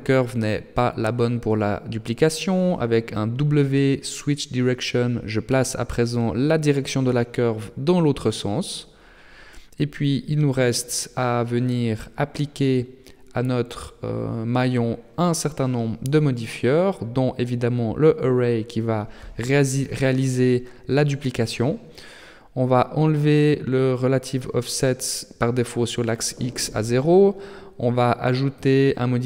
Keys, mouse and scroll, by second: 1.3 w, 3.9 w, 9.6 Tab, 10.4 Tab, 10.8 middle click, 13.1 Tab, 13.6 middle click, 15.2 right click, 15.6 shift+middle click, 16.0 scroll down 2, 16.3 scroll up 1, 16.4 middle click, 16.8 scroll down 1, 16.9 shift+scroll up 1, 17.0 shift+middle click, 19.4 click, 24.6 click, 28.2 click.